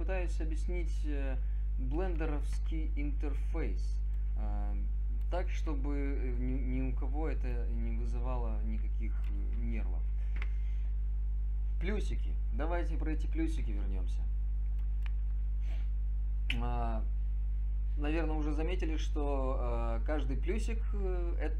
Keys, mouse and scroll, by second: 3.8 click.